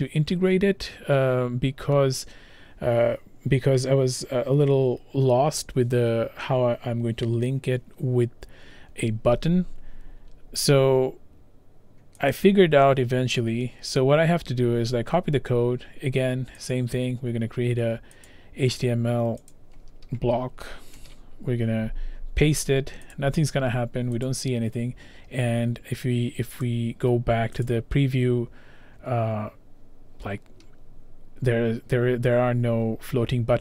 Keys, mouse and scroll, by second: 12.3 click, 16.6 click, 16.7 click, 18.3 click, 19.5 click, 21.0 ctrl+v, 23.2 click, 24.3 click, 26.7 click, 32.0 scroll, 32.4 scroll down 1, 32.7 scroll, 32.8 scroll down 1, 33.0 scroll, 33.5-33.6 scroll down 1.